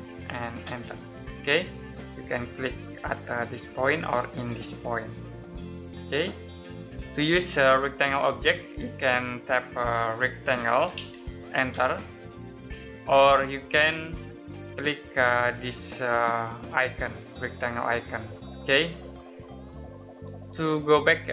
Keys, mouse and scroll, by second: 0.0-0.5 typing, 5.1 click, 6.1-6.7 scroll down 1, 7.0 middle click, 7.7-8.0 scroll up 1, 8.3-8.7 scroll down 1, 8.7 middle click, 10.2-11.6 typing, 12.6 click, 20.1 Escape, 21.2 middle click.